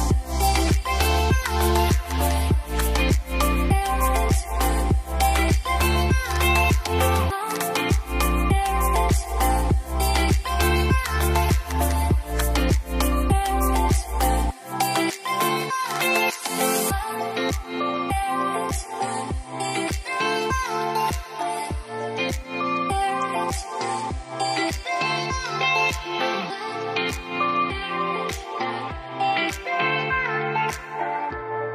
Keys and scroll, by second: 29.5 alt+shift+F3, 31.0 ctrl+a.